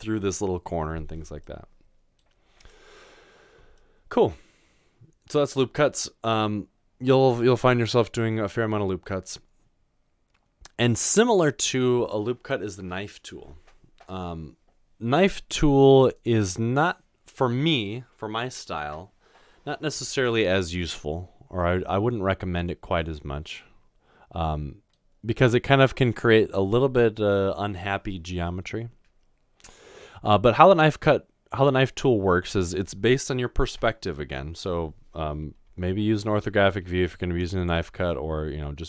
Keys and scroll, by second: 36.3-36.8 typing.